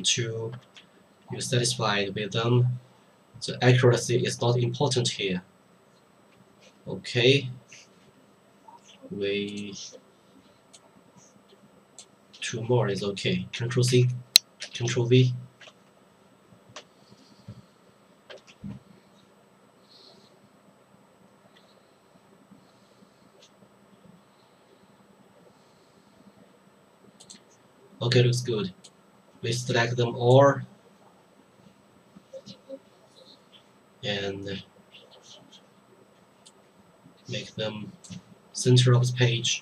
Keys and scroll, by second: 13.5 ctrl+c, 13.9 ctrl+c, 14.6 ctrl+v, 15.6 Right.